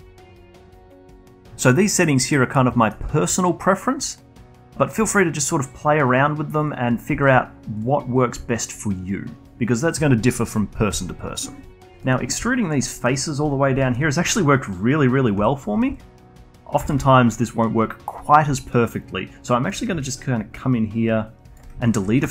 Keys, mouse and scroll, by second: 0.0-0.7 alt+drag, 0.7-1.5 alt+middle drag, 2.8 middle click, 3.4-5.7 alt+drag, 6.1 click, 6.6 click, 6.8 click, 7.1-7.8 alt+drag, 8.2 click, 8.5-11.6 alt+drag, 12.0 middle click, 12.5-12.9 alt+drag, 12.9 alt+middle drag, 13.1-13.8 alt+drag, 13.8-15.4 alt+middle drag, 15.4 3, 16.0-16.8 alt+drag, 16.8 a, 17.0 a, 18.6-20.0 alt+drag, 20.0-21.8 ctrl+right drag, 21.8 alt+click.